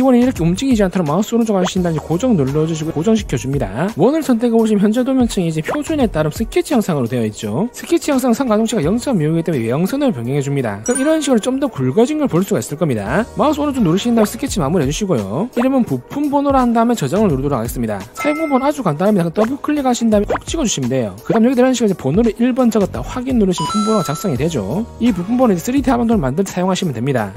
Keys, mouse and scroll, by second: 0.2 click, 1.6 ctrl+right click, 2.7 click, 3.5 click, 19.3 click, 19.8 click, 19.9 click, 20.1 click, 20.8 click, 22.8 1, 23.4 click.